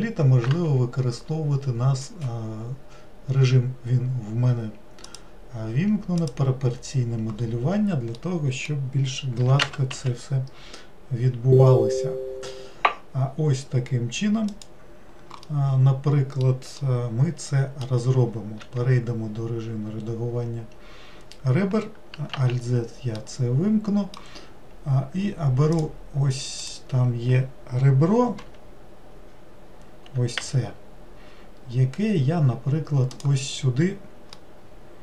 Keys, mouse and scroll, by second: 5.1 click, 8.1-9.4 middle drag, 9.4 g, 15.5-18.6 middle drag, 19.7-22.0 scroll up 3, 22.3 alt+z, 23.2-25.7 middle drag, 25.7 click, 26.6 click, 34.4-35.0 middle drag.